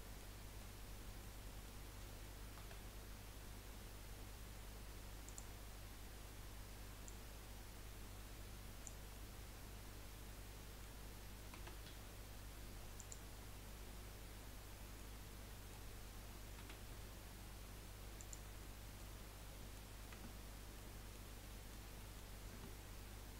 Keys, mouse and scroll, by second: 0.6-2.7 middle drag, 2.7 s, 7.0 click, 9.1-11.8 middle drag, 11.8 s, 13.4 scroll down 1, 13.8-15.3 middle drag, 15.3 scroll down 3, 15.5-16.9 middle drag, 16.9 s, 18.7 middle click, 19.3 scroll up 2, 19.4 middle click, 20.2 Tab, 20.9-21.9 middle drag, 22.5 Tab.